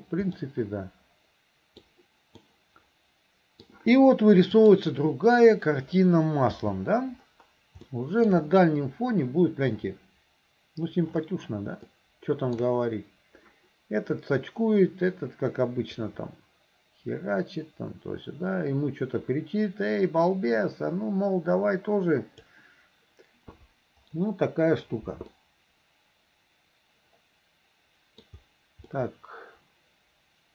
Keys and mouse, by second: 0.5-1.9 middle drag, 2.5-3.7 middle drag, 4.6 click, 6.5 n, 8.0 shift+middle click, 12.0 shift+middle click, 16.2-22.7 drag, 25.4-28.2 middle drag, 28.9-30.5 middle drag.